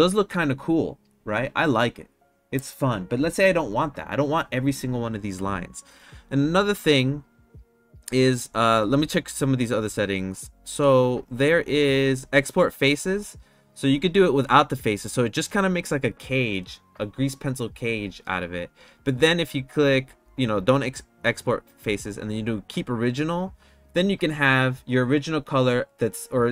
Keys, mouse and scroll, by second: 13.1 click, 23.0 click.